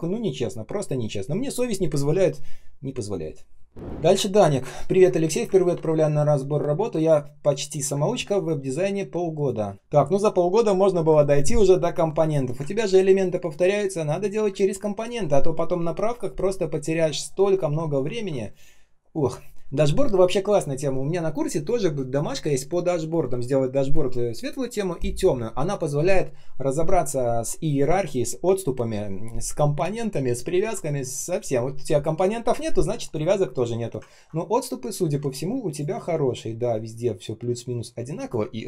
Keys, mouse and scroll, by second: 4.0-4.7 ctrl+scroll down 1, 7.8 space, 8.3 space, 9.7 ctrl+shift+3, 12.2 ctrl+shift+3, 12.6 ctrl+scroll up 1, 14.4 space, 14.9 space, 14.9 space, 17.4-18.4 ctrl+scroll down 1, 18.4 ctrl+shift+3, 31.1 ctrl+shift+3, 33.5 ctrl+shift+3, 34.0 ctrl+scroll up 1, 35.0 space, 35.5 space, 35.6 space, 38.1 space.